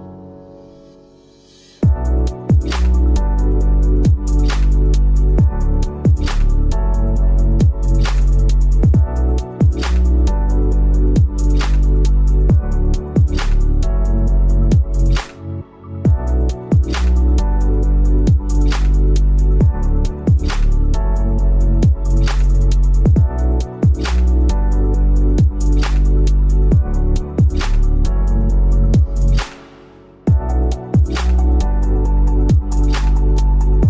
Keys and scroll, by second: 1.5 v, 3.7 p, 7.5 v, 9.1 p, 10.5 v, 10.5 a, 11.1 v, 12.1 ctrl+z, 12.5 p, 13.4 v, 13.5 a, 15.1-17.0 typing, 17.8 ctrl+', 18.8 ctrl+shift+', 20.5 p, 27.4 ctrl+z, 33.8 v.